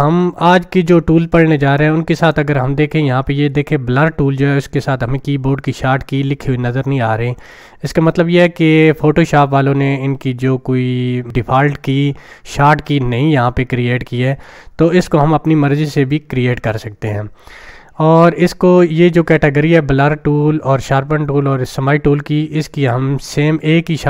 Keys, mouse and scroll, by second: 1.8-2.4 drag.